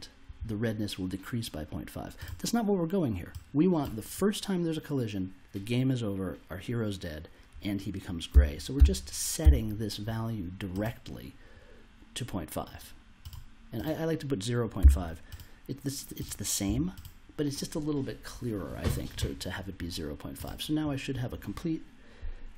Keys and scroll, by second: 8.3 0, 8.7 ., 9.4 5, 14.8 0, 16.6 0.